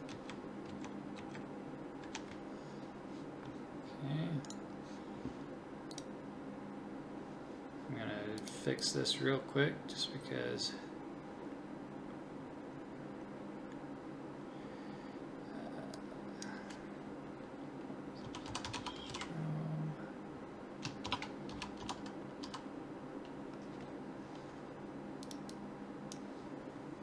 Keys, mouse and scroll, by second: 0.1 Right, 0.7 Left, 1.2 Right, 2.0 Left.